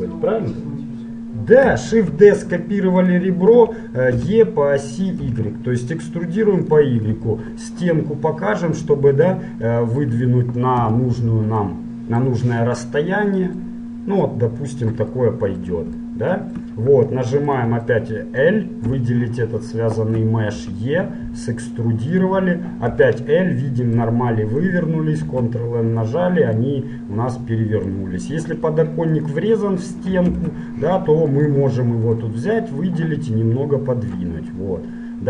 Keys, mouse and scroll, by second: 1.6 middle click, 2.1 shift+d, 4.2 e, 7.2 KP_Divide, 8.1-11.0 middle drag, 11.0 KP_Decimal, 11.2-14.5 middle drag, 14.5-16.3 drag, 19.0 l, 19.7-23.5 middle drag, 20.7 e, 23.1 l, 25.3 ctrl+n, 28.4 middle click, 29.3-31.3 right drag, 30.5 ctrl+Tab, 32.3 right click, 33.2-34.7 drag, 34.7-35.2 middle drag.